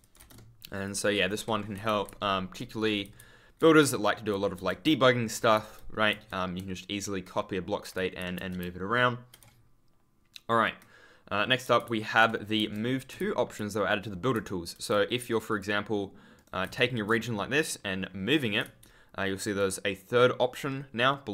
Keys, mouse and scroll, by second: 0.1 e, 0.7 shift+click, 1.4 Escape, 1.7 w, 3.1 ctrl+w, 7.9 ctrl+w, 8.1 ctrl+d, 8.3 ctrl+space, 11.7 ctrl+w, 11.8 ctrl+d, 12.5 1, 13.1 scroll up 1, 13.3 w, 14.3 ctrl+space, 15.4 click, 16.3 right click, 16.3-17.1 typing, 17.4 scroll down 1, 18.5 w, 18.7 ctrl+a.